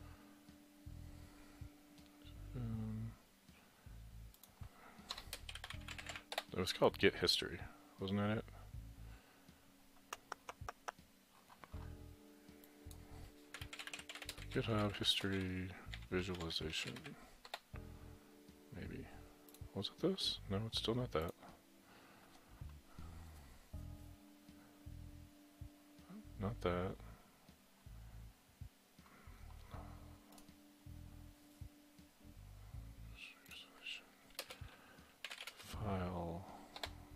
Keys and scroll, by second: 5.1-6.8 typing, 13.3-18.0 typing, 19.4-20.1 typing, 35.0-35.9 typing, 36.8 Return.